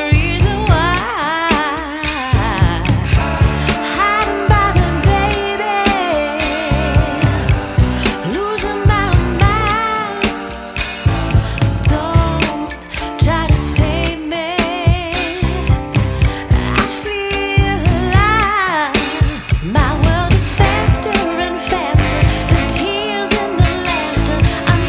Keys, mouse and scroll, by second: 2.3 click, 3.6 click, 5.8 click, 10.3 click, 21.3 shift+d, 22.4 click.